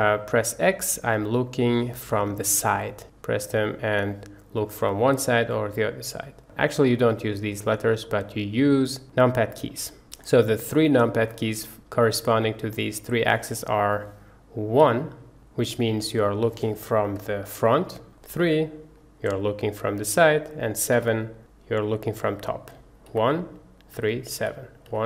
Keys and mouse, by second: 3.6 click, 8.1 click, 9.6 click, 10.3-11.3 drag, 13.6 click, 14.8 KP_1, 17.5 shift+click, 17.6 shift+middle click, 18.4 KP_3, 21.0 KP_7, 23.1-25.0 typing.